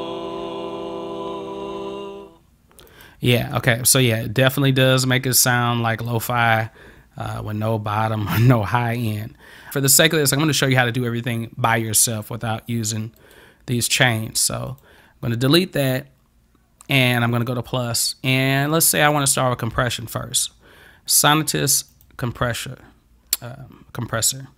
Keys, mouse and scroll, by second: 3.0 click, 4.1-6.1 drag, 13.2 right click, 14.7 click, 17.4 click, 21.9 click.